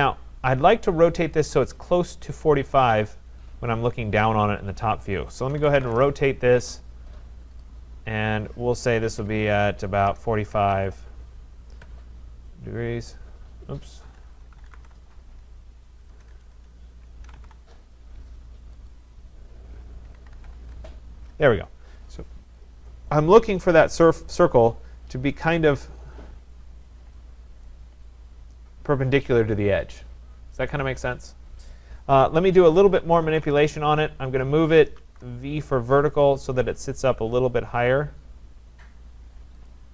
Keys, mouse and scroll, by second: 2.2 click, 2.3 click, 2.4 shift+click, 3.5-4.5 scroll up 7, 5.1-6.3 typing, 5.6 scroll, 7.6 click, 9.2-11.1 typing, 11.8 Return, 13.9-17.9 typing, 18.9 click, 19.8-20.9 typing, 22.7 click, 23.5-24.3 typing, 24.0 click, 26.1 click, 26.8-27.1 scroll, 27.6 right click, 28.1-28.4 scroll, 32.6 middle click, 32.7-35.5 typing, 36.4 click, 39.6 v, 39.7 click.